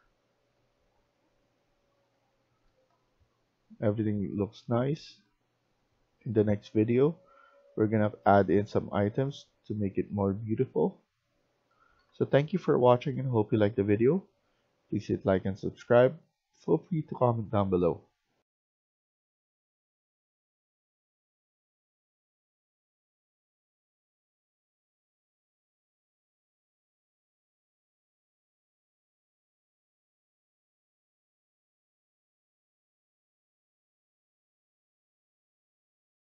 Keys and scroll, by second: 0.0-2.8 typing, 5.2 q, 8.8-15.0 typing, 17.0 typing.